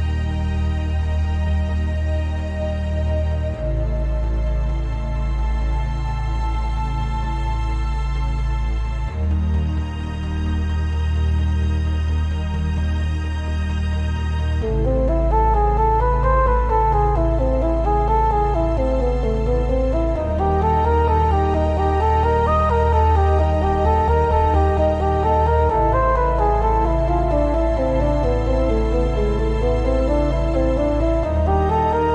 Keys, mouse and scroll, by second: 0.1 click, 0.2 g, 0.9 click, 1.0 g, 1.6 click, 2.4 click, 2.6 g, 3.5 click, 3.8 click, 4.0 g, 4.7-5.1 shift+middle drag, 5.1 click, 5.2-8.9 typing, 6.0 click, 6.9 click, 7.8 click, 8.8 click, 9.8 click, 10.0 g, 10.9 click, 11.2 g, 11.8 click, 12.1 click, 12.3 g, 12.9 drag, 13.2 g, 13.8 click, 17.5-17.8 scroll down 1, 17.8-20.5 shift+middle drag, 18.6 scroll down 1, 19.1 scroll up 1, 19.8-20.1 scroll up 1, 20.5 click, 21.0 click, 21.1-25.1 typing, 21.7 click, 22.5 click, 23.1 click, 24.0 click, 25.0 click, 25.9 click, 30.5 click, 30.9 shift+click, 31.0-31.8 right drag, 31.8 click, 31.9 g.